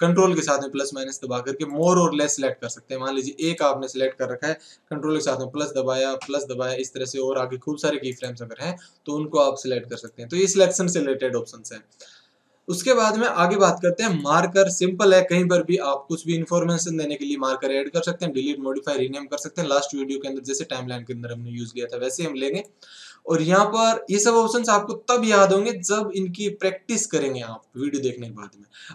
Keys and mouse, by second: 3.5-5.1 right drag, 8.1-10.0 right drag, 9.9-11.7 drag, 14.1-16.0 drag, 22.3-23.8 drag.